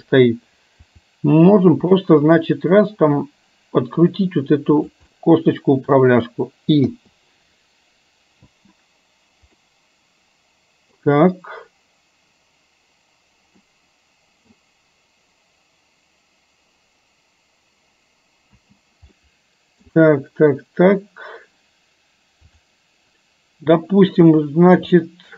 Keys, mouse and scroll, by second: 0.9 r, 5.2-6.1 middle drag, 8.6 space, 9.8-11.2 middle drag, 13.8-14.8 middle drag, 18.7 space, 19.2-19.9 middle drag, 22.7 drag, 24.4-24.8 shift+middle drag, 25.1-25.3 middle drag.